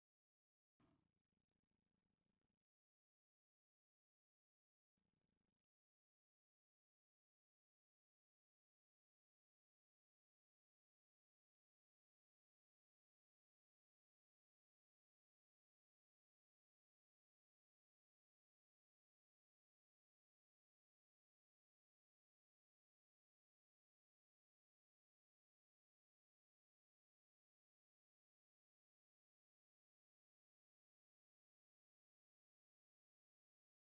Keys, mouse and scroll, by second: 1.3 z, 5.4 f, 11.0 middle click, 14.5 click, 14.9 click, 15.9 middle click, 16.6 shift+middle click, 17.5 click, 17.9 middle click, 20.4 v, 21.4 click, 23.1 f, 26.0 x, 28.6 click, 29.5 click, 30.9 v, 31.4 right click, 31.6 v.